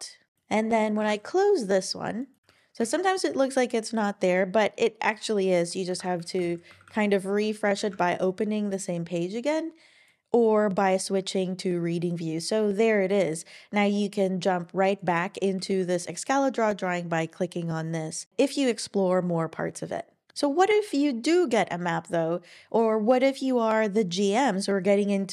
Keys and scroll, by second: 1.0 super+w, 2.4 Page_Down, 2.4 Page_Up, 2.8 Page_Down, 5.9 super+w, 6.4 super+o, 6.8 typing, 7.8 super+Return.